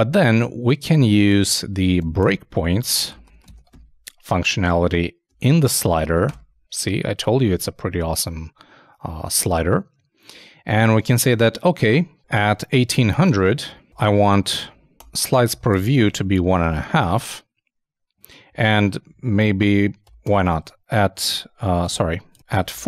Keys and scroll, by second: 5.4 shift+;, 5.5 shift+space, 5.8 shift+[, 6.3 shift+Return, 12.6-15.7 typing, 21.3 alt+i, 21.9 alt+super+z.